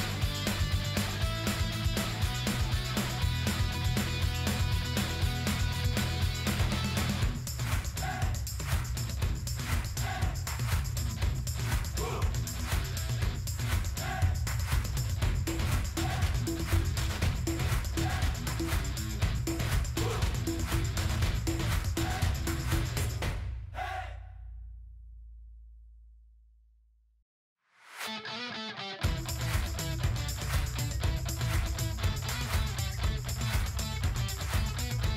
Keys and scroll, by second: 27.4 ctrl+g.